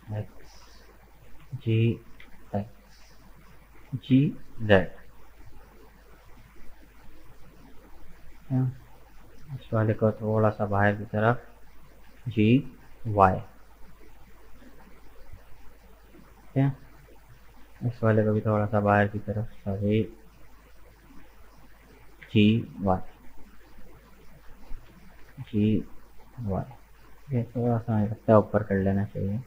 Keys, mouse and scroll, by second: 0.7 right click, 1.4 g, 3.8 g, 6.1-8.9 middle drag, 8.9 right click, 9.2 middle click, 10.1 shift+right click, 10.5-12.2 middle drag, 12.2 g, 15.4-17.5 middle drag, 17.5 right click, 18.1 shift+right click, 18.8 f, 19.9 ctrl+z, 21.6 shift+right click, 22.2 g, 24.0 right click, 24.6 shift+right click, 25.2 g, 27.6 g.